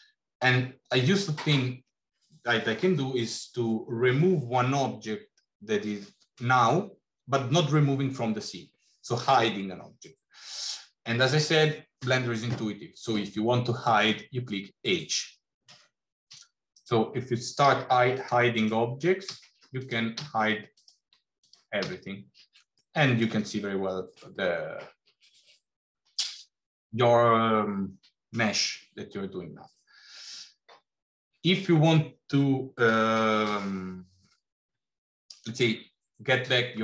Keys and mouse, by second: 10.5 click, 14.8 h, 16.6 click, 17.6 h, 18.0 click, 19.3 h, 19.7 click, 20.6 click, 21.3 click, 22.7 middle click, 26.9 middle click.